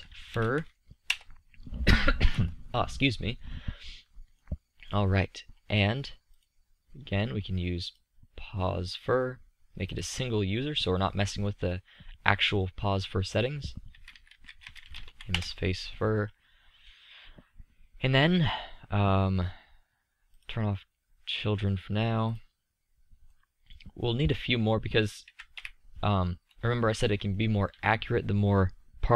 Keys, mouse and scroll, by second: 3.5-4.2 middle drag, 6.0 click, 8.2-9.6 middle drag, 11.4-13.0 middle drag, 14.8-20.5 middle drag, 23.0-24.9 middle drag, 24.9 KP_3, 25.2 KP_5.